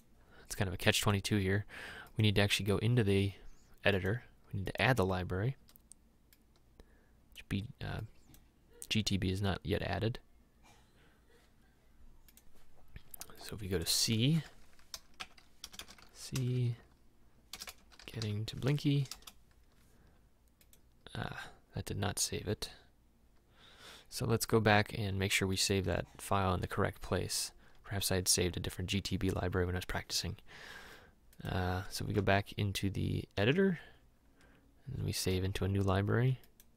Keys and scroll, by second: 14.3-18.2 typing, 18.9 Down, 19.1 Return, 32.3 alt+Tab, 33.7 alt+Tab.